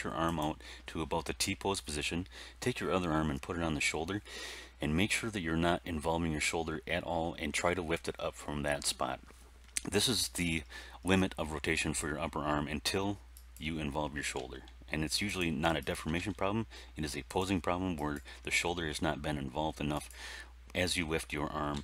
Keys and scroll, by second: 14.3 r, 16.1 r, 18.4 r, 21.7 a.